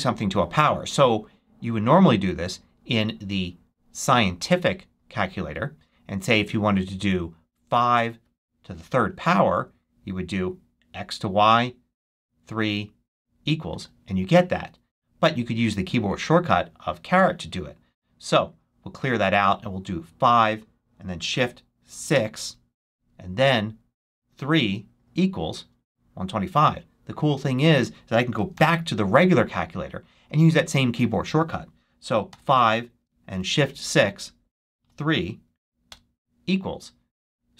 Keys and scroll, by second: 21.8 shift+6, 28.4 super+1, 32.2 5, 32.9 shift+5, 33.7 shift+6, 34.7 shift+3, 35.8 Return.